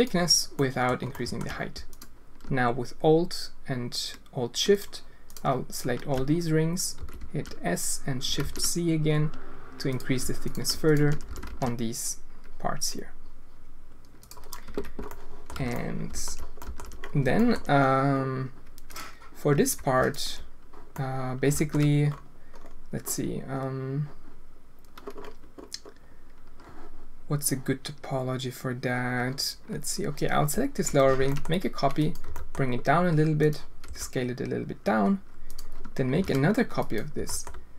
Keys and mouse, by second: 0.6 click, 1.1 alt+shift+click, 1.9-2.4 alt+drag, 4.7-5.7 alt+shift+drag, 7.0 s, 9.9 click, 11.2 s, 14.6 Tab, 15.1-15.4 drag, 15.6 alt+a, 15.8-16.2 drag, 16.5 alt+shift+drag, 17.3 shift+drag, 19.5 Tab, 20.9 click, 31.1 shift+d, 32.2 g, 33.8 s, 36.1 shift+d, 37.1 g.